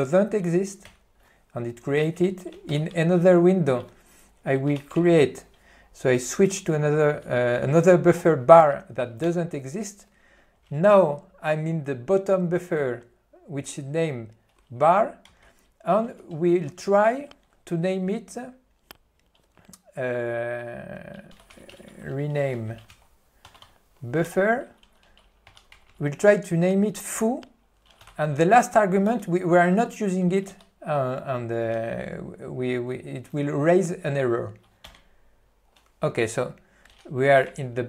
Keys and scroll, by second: 0.9 Return, 2.8 Down, 9.4 Return, 15.3 alt+:, 22.4 ., 24.3 Tab, 26.5 ., 28.2 f, 35.4 Return, 37.6 ctrl+o.